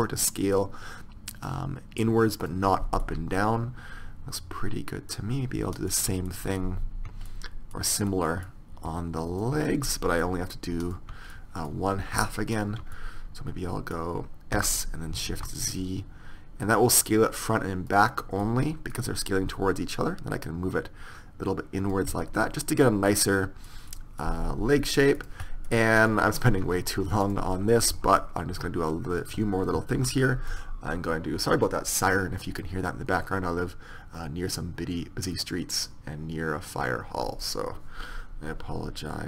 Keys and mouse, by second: 3.1-5.1 middle drag, 5.8-15.0 middle drag, 14.6 s, 18.5-20.0 middle drag, 20.0-21.9 drag, 22.2-23.8 middle drag, 25.2-27.2 drag, 26.1 right click, 28.0 KP_1, 28.6 s, 30.0 ctrl+r.